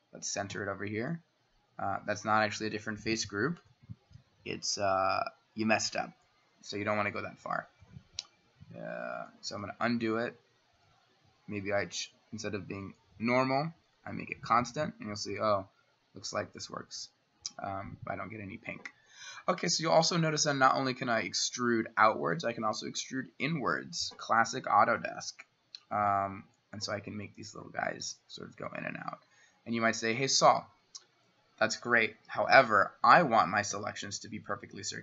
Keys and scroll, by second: 0.6 c, 10.0 ctrl+z, 10.4 ctrl+z, 10.9 ctrl+z, 24.6 c, 32.4 Escape, 32.7 Escape, 33.8 s.